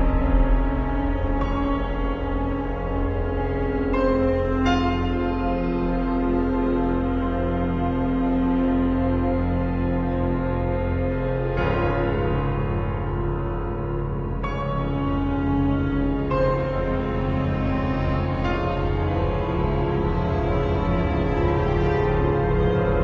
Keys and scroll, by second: 13.3 z, 14.3 b, 14.7 ], 17.3 super+z.